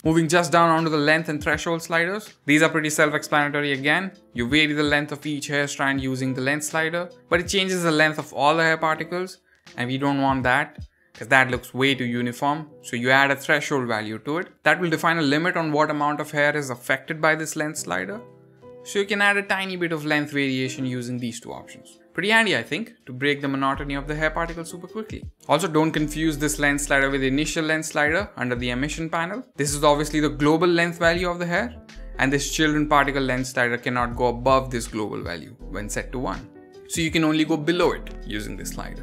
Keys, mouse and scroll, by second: 0.0-0.7 scroll down 10, 3.1-11.7 drag, 13.4-16.0 drag, 16.3-17.5 drag, 17.8-19.2 drag, 19.6-20.7 drag, 21.0-22.2 drag, 22.5-23.0 middle drag, 23.1-23.5 shift+middle drag, 23.5-23.9 scroll up 5, 24.1-24.7 shift+middle drag, 24.8-25.4 middle drag, 25.4 scroll down 1, 26.7-29.2 drag, 29.5-31.3 scroll down 11, 31.3-38.3 drag.